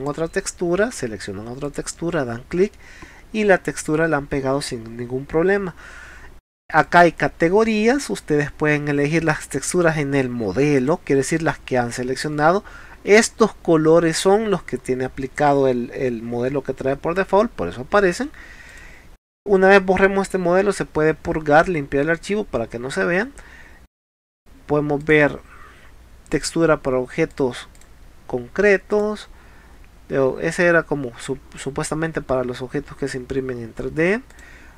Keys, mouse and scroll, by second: 0.0 click, 1.7 click, 2.8 middle click, 6.8 click, 7.9 scroll up 4, 10.8 click, 14.2 scroll down 2, 18.7 click, 25.1 click, 26.4 click, 27.3 click, 27.8 click, 28.9 click, 34.3 click.